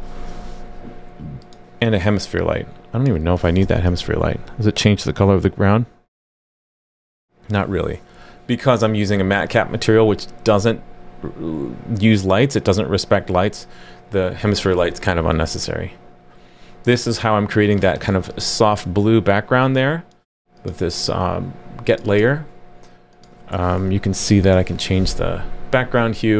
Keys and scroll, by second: 3.6 super+/, 3.8 super+s, 24.5 super+s.